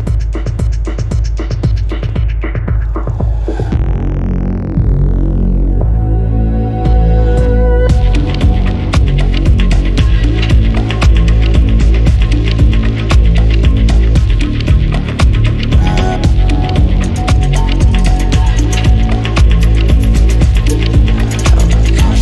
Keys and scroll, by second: 0.0-1.6 typing, 0.4 Return, 2.2 Escape, 13.1 Escape.